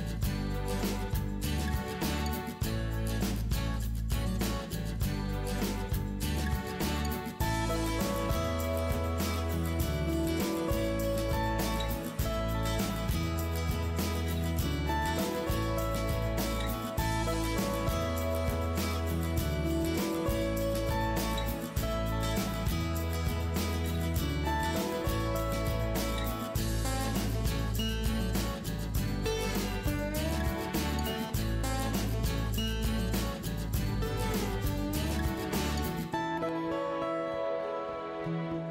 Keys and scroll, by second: 2.1-2.5 ctrl+-, 2.8 ctrl+=, 2.9 ctrl+=, 3.2 ctrl+space, 11.6 space, 14.2 ctrl+z, 24.9 space, 26.0 ctrl+-, 26.2 ctrl+-, 26.2 ctrl+-, 26.6 ctrl+space, 28.7 ctrl+=.